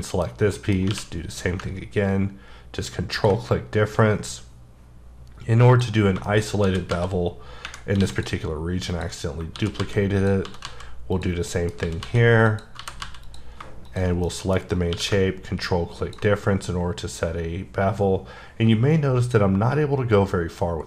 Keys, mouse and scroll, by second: 0.2 scroll up 2, 0.5 middle click, 0.9 q, 3.1 ctrl+click, 5.9 scroll down 3, 6.2 shift+middle click, 6.6 shift+d, 6.9 z, 8.0 x, 8.1 click, 8.9 click, 9.5 shift+d, 9.8 z, 10.1 click, 10.4 s, 10.6 z, 11.1 click, 11.4 scroll up 1, 11.5 middle click, 11.8 s, 12.0 z, 12.4 click, 12.7 g, 13.0 z, 13.2 click, 14.2 middle click, 14.6-14.9 scroll up 1, 14.9 q, 15.9 ctrl+click.